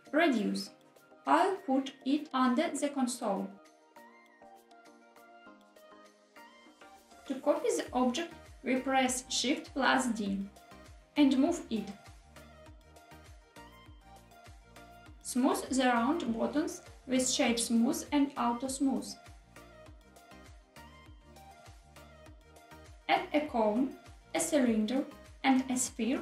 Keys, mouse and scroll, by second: 1.1 click, 1.1 middle click, 1.3-2.9 typing, 1.8 click, 1.9 shift+middle click, 1.9 scroll down 3, 2.6 click, 2.6 middle click, 4.0 click, 4.4 g, 5.0 click, 5.1 g, 5.6 y, 6.1 click, 6.4 g, 7.1 click, 8.8 shift+d, 12.9 click, 13.2 middle click, 13.2 g, 13.4 y, 14.8 click, 15.4 click, 16.2 right click, 18.1-18.7 drag, 18.9-20.6 drag, 20.7-21.7 drag, 21.7 right click, 22.6 click, 23.1-25.5 typing, 23.7 shift+middle click, 23.7 scroll down 3, 25.3 click.